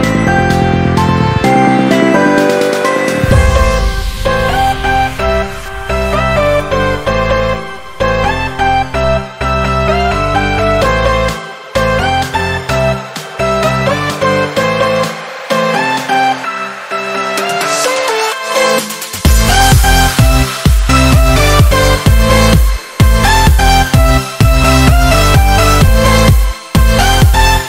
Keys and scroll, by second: 1.3 ctrl+z, 1.5 ctrl+z, 5.8 ctrl+z, 17.5 ctrl+-, 18.1 ctrl+z, 19.5 ctrl+-, 23.6 ctrl+-.